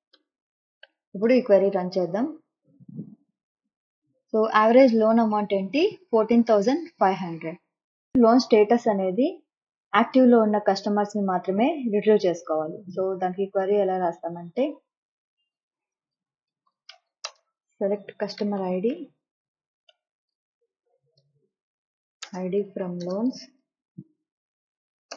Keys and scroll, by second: 0.0-0.7 typing, 15.9-25.1 typing.